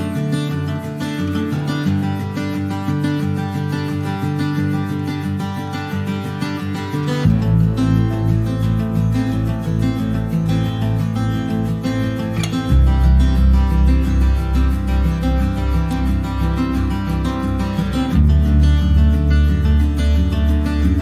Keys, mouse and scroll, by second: 1.0 middle click, 1.4 s, 3.2 click, 3.4 scroll up 2, 3.7 middle click, 4.6 click, 5.7 click, 7.5 s, 9.4 scroll down 1, 9.7 middle click, 10.5 click, 14.3 click, 14.7 middle click, 14.9 scroll up 1, 15.1 shift+middle click, 15.6 scroll up 1, 15.8-18.4 shift+middle drag, 18.4 click, 19.5 click.